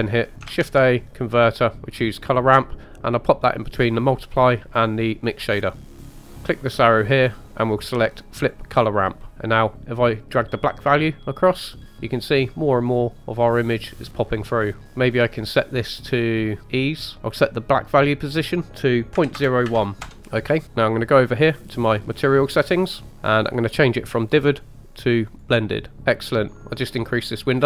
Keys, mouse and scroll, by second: 0.5 shift+a, 6.0 click, 6.4-8.5 drag, 10.3-14.8 drag, 14.8-15.4 scroll down 2, 15.4-17.1 drag, 18.4-20.1 drag, 20.2 middle click, 22.9 click, 23.1 scroll down 3, 25.4-26.0 drag, 26.0-26.5 scroll down 1, 26.5 click.